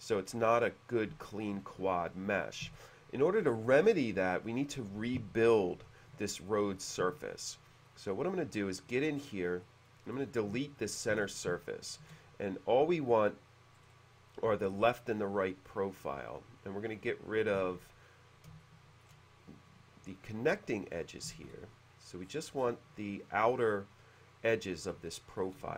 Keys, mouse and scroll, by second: 1.5-2.5 shift+middle drag, 2.8 space, 5.5 click, 6.3-7.4 drag, 7.5 click, 8.0 click, 8.1 click, 9.2-9.6 middle drag, 9.7 middle click, 10.2 click, 11.2 ctrl+d, 11.8 shift+middle click, 13.8-14.1 scroll up 1, 16.0-17.5 drag, 17.8 ctrl+d, 18.7 shift+middle click, 20.2-21.4 drag, 21.5 ctrl+d, 22.3-22.6 scroll down 1, 25.2 ctrl+d, 25.2 middle click.